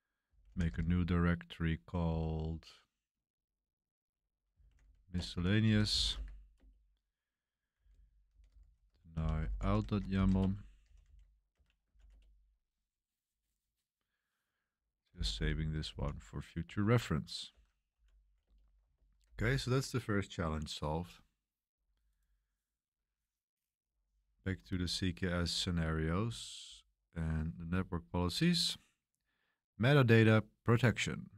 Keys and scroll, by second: 0.0-1.2 typing, 4.3-12.4 typing, 10.4 Return, 14.8-16.6 typing, 17.5 Escape, 17.7-19.2 typing.